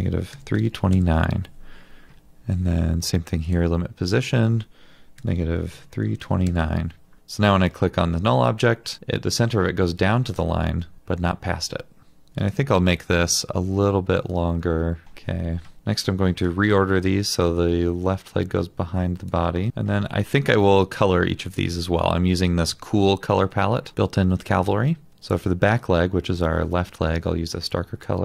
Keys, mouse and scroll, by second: 0.0-1.2 typing, 5.2-6.8 typing, 12.4 double click, 15.7 ctrl+z.